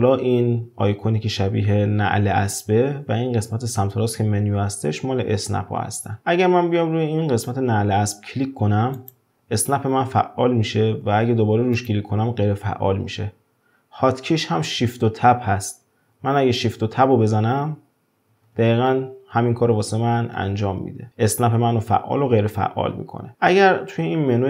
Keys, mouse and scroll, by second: 9.0 click, 11.8 drag, 16.5 shift+Tab, 17.4 shift+Tab, 20.4 shift+Tab.